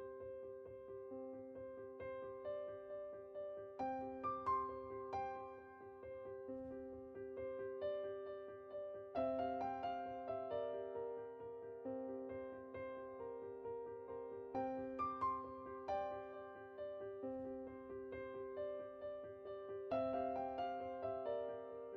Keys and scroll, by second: 20.4-20.7 typing.